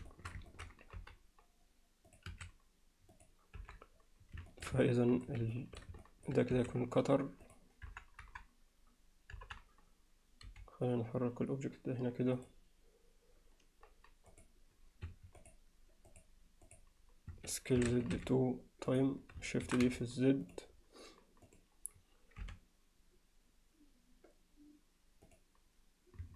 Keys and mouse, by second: 0.1 shift+middle click, 0.5 middle click, 1.0 g, 2.3 s, 3.6 KP_7, 4.5 alt+shift+middle click, 4.8-5.3 alt+middle drag, 5.5 alt+shift+middle drag, 6.0 alt+middle click, 6.5 s, 7.9 KP_1, 8.2 KP_3, 9.4 KP_1, 10.5 g, 14.5-15.0 drag, 15.1 Escape, 15.4 click, 16.1-17.3 drag, 17.3 Escape, 17.8 s, 19.7 shift+d, 21.5 click, 22.4 r.